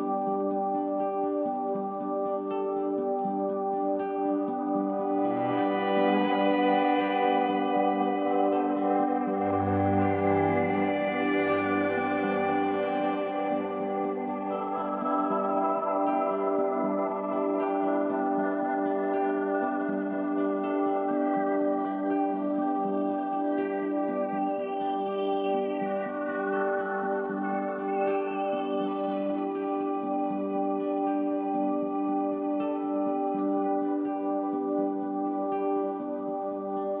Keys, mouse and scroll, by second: 1.3-2.6 scroll up 2, 2.6-5.6 drag, 6.2-11.0 drag, 13.5-16.4 drag, 17.1-20.1 drag, 20.7-24.7 drag, 27.5-28.4 drag, 28.4-30.0 middle drag, 30.0-33.0 drag, 34.1-37.0 drag.